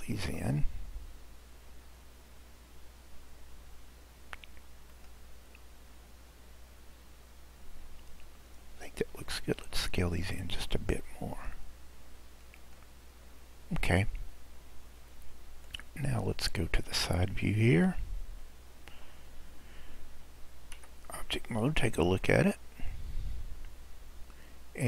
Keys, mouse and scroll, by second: 0.2 s, 8.1-8.6 scroll, 9.5 click, 11.4 s, 13.1 scroll, 13.2-14.0 scroll down 2, 15.8-18.9 middle drag, 20.8 Tab, 21.3-22.9 scroll up 12, 22.9-24.8 middle drag.